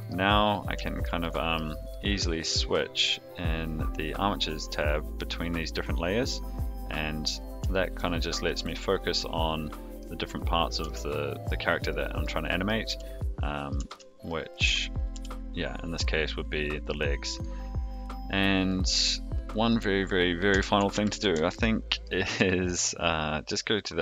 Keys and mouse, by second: 0.8 shift+middle click, 1.2 middle click, 5.2 click, 6.5 click, 6.9 middle click, 7.7 shift+middle click, 8.4-10.0 middle drag, 10.8 shift+middle click, 11.8 middle click, 12.5 click, 12.8 g, 13.8 ctrl+z, 14.2 middle click, 14.6 Tab, 15.1 g, 17.3 click, 18.2-18.6 drag, 20.5 a, 20.9 alt+g, 21.2 alt+r, 21.9 middle click, 22.4 shift+middle drag, 23.7 click.